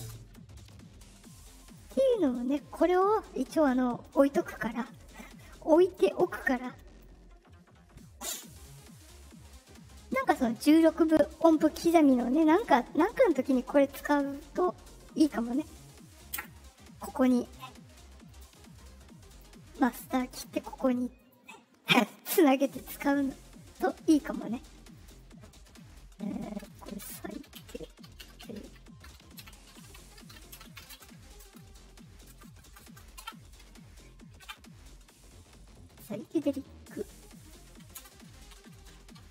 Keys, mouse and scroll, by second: 1.7 click, 4.0 click, 5.7 click, 6.9 click, 9.8 click, 18.2 click, 19.2 click, 19.8 click, 20.2 click, 21.1 click, 21.8 click, 24.0 middle click, 24.9 click, 28.1 d, 30.9-32.8 typing, 36.5 middle click, 36.5 scroll up 2, 37.3 click, 37.9 space.